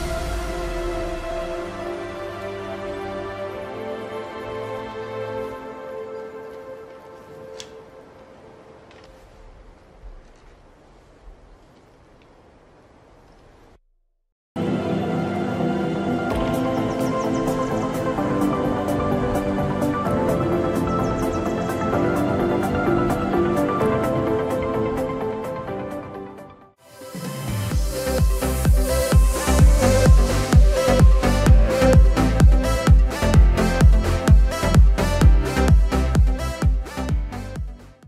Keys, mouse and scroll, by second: 5.2 shift+click, 6.1 r, 6.7 click, 11.3 scroll down 1, 11.3 middle click, 14.8-15.1 scroll up 1, 15.5 scroll down 1, 17.0 F4.